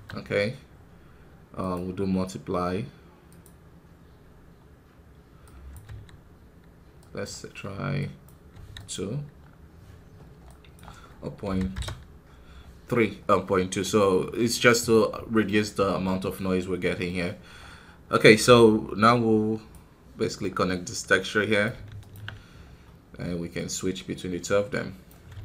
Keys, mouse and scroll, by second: 0.0 scroll up 1, 3.4 click, 4.2 scroll up 2, 5.5-9.3 drag, 9.3 scroll down 3, 11.6-25.4 drag.